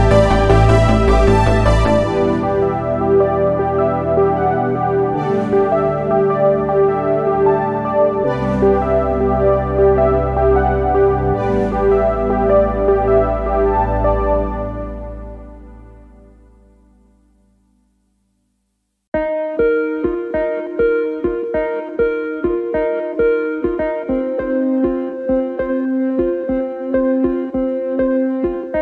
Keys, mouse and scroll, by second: 0.1 click, 0.6 shift+click, 1.1 shift+click, 1.6 click, 2.7-3.9 middle drag, 3.9 ctrl+r, 5.6 ctrl+r, 8.8 ctrl+z, 10.6 scroll down 4, 10.9-11.9 middle drag, 11.9-12.4 scroll up 5, 12.4 click, 12.8 shift+click, 13.1 shift+click, 13.7 g, 15.1 click, 15.6 shift+click, 15.9 shift+click, 16.4 g, 18.3-19.9 middle drag, 19.9 1, 20.1 click, 20.7 g, 22.1 middle click, 22.6 click, 22.9 g, 23.7 middle click, 24.6 2, 24.9 click, 25.3 shift+click, 26.0 click, 26.5 shift+click, 26.9 shift+click, 27.2 middle click, 28.1 click.